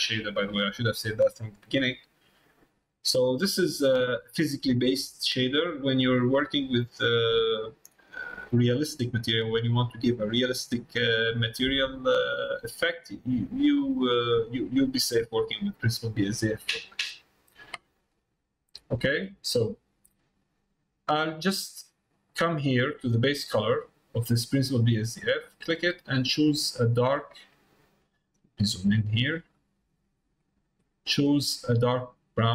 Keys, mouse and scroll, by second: 3.8-5.3 drag, 9.8 middle click, 11.3 middle click, 13.9-15.1 drag, 18.2 middle click, 18.8 shift+middle click, 19.6 middle click, 21.8 click.